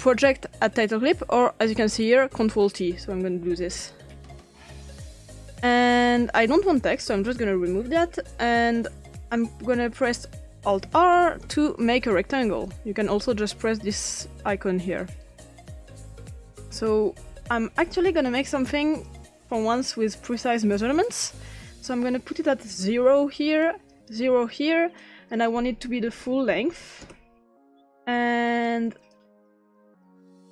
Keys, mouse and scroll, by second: 0.0 click, 2.6 click, 3.5 ctrl+t, 5.1 click, 6.9 click, 7.2 click, 8.0 Delete, 10.6 alt+r, 11.8 click, 13.0 click, 15.2-16.7 drag, 20.1 click, 22.0 click, 22.9 0, 23.6 click, 24.2 typing, 25.0 click, 26.1-27.5 typing, 28.6-30.5 drag.